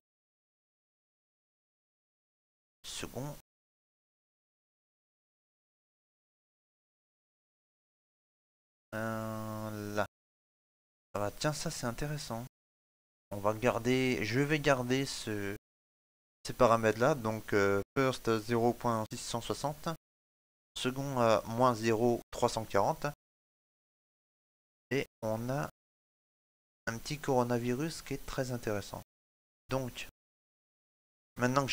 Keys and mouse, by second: 11.6 middle click, 22.8 shift+middle click, 23.3 ctrl+middle click, 23.9 shift+middle click, 24.2 middle click, 26.2 ctrl+middle click, 26.9 middle click, 27.6 ctrl+middle click, 28.0 middle click, 29.5 right click, 29.9 shift+middle click, 30.3 middle click.